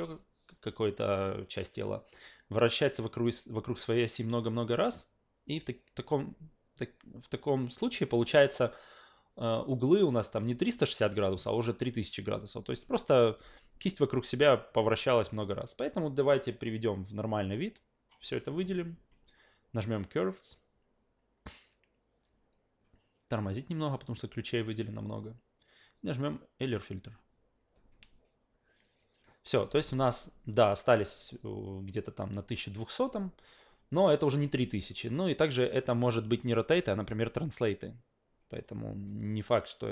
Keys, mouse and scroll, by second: 16.6-18.1 drag, 20.2 click, 26.6 click, 30.0 click, 38.6 click.